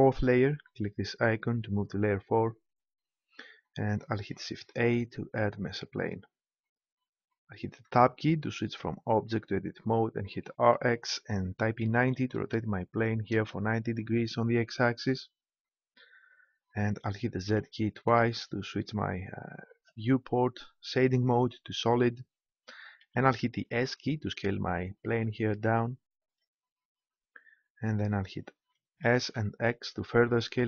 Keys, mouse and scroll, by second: 4.3 shift+a, 7.8 Tab, 10.4 r, 17.4 z, 18.0 z, 23.0 s, 26.3-28.2 drag, 29.0 s.